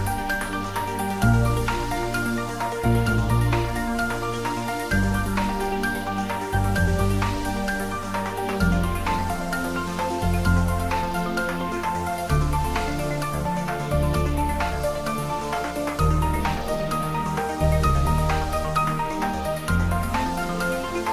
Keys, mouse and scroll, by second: 1.5 s, 3.9 y, 14.2 click, 15.4-18.0 typing, 16.8 click.